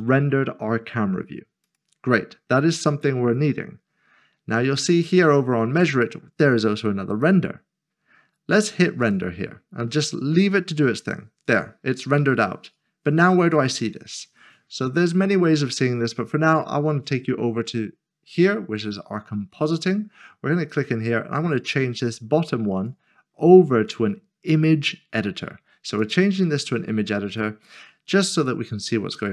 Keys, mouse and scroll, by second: 1.6-5.3 scroll down 1, 7.2 click, 19.8 click, 22.8 click.